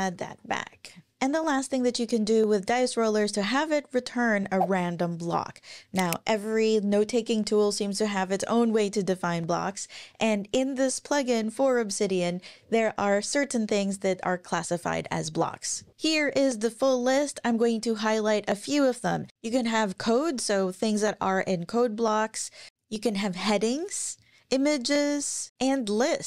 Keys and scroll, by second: 0.0-1.0 typing.